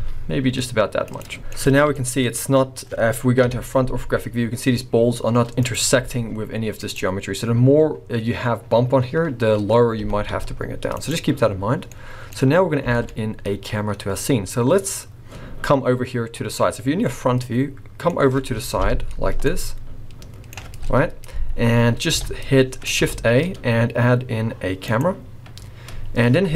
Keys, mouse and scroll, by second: 1.4 middle click, 1.7 alt+a, 2.0 middle click, 3.4 KP_1, 4.0-4.3 scroll up 7, 5.6 click, 6.0 g, 10.0 g, 11.3-12.0 scroll down 3, 11.9 middle click, 12.9 alt+a, 13.0 middle click, 13.9-14.2 scroll down 2, 14.2 middle click, 17.1 middle click, 17.1 scroll up 1, 18.8 KP_5, 19.5 middle click, 21.4-21.9 scroll up 4, 22.1 KP_5, 23.1 shift+a.